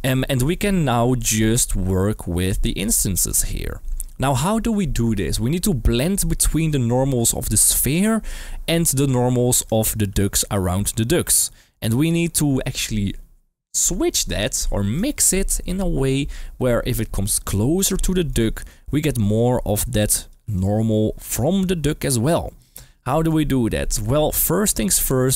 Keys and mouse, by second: 9.7 shift+middle click, 10.2-11.6 d, 17.3 click, 17.3-20.3 d, 20.5 click, 20.5-21.5 d, 21.9 d, 22.1 d, 23.9 d, 24.1 middle click, 24.7 middle drag.